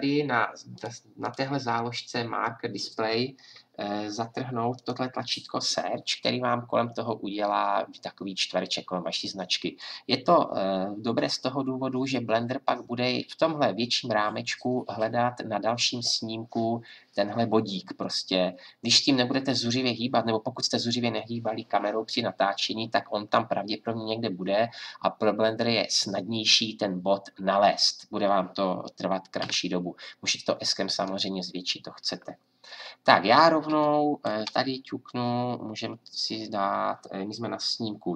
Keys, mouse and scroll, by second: 0.7-4.1 drag, 4.7-29.4 drag, 29.4 s, 32.9-38.1 drag.